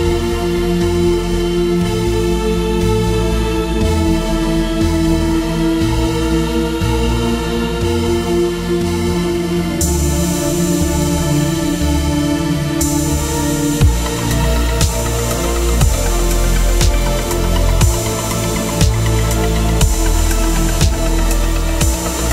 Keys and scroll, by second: 8.4 3, 8.6 Return, 18.4-19.6 typing, 21.9-22.3 typing.